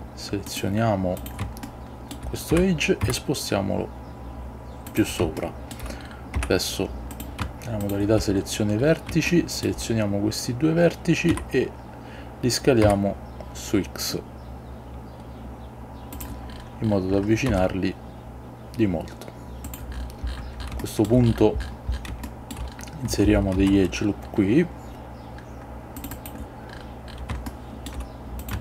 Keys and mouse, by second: 1.3 click, 1.7 shift+middle click, 2.6 g, 3.1 z, 5.0 click, 5.5 shift+middle click, 6.5 Tab, 7.2 click, 7.9 shift+click, 9.5 shift+middle click, 11.4 s, 12.9 x, 16.2 click, 17.6 s, 19.7 click, 22.4 shift+middle click, 23.7 ctrl+r, 26.3-27.4 drag, 27.6 shift+middle click, 28.5 click.